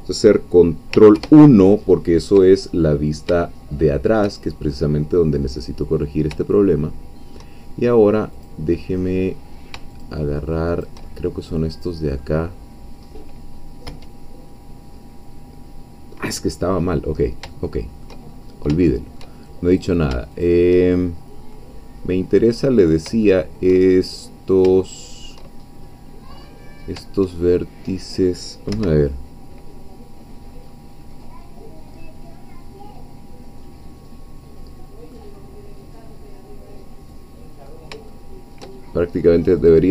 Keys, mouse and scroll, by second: 1.2 ctrl+1, 2.8-3.3 ctrl+scroll up 3, 3.5-4.5 shift+middle drag, 4.5-5.0 shift+scroll up 3, 6.6 shift+middle click, 8.3 click, 10.0-11.1 shift+drag, 11.1-12.2 shift+middle drag, 12.5 scroll down 1, 13.0 scroll up 1, 13.9 1, 14.7-15.6 scroll down 2, 15.6-17.4 scroll up 2, 17.6 shift+middle click, 18.3-18.7 shift+scroll up 3, 19.0 shift+middle click, 19.7 shift+click, 20.3 shift+click, 21.1 shift+middle click, 21.7-22.5 scroll down 2, 22.6 scroll down 2, 23.3 shift+middle click, 24.1 shift+middle click, 24.8 shift+middle click, 25.8 shift+scroll up 2, 26.3-26.9 scroll down 2, 27.4 shift+middle click, 28.7 1, 30.2 KP_1, 30.7-31.3 scroll up 2, 31.4-31.8 scroll up 2, 33.4-35.1 scroll down 2, 35.1-37.9 middle drag, 38.1 shift+middle click, 39.6 click.